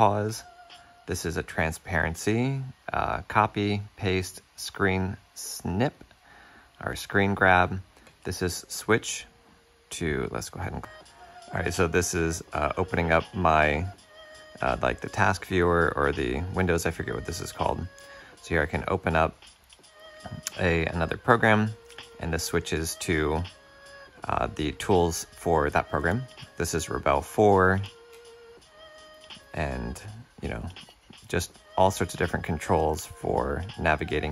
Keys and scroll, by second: 8.2 alt+Tab, 11.7 super+Tab, 30.5 space, 31.8 z, 33.3 F7.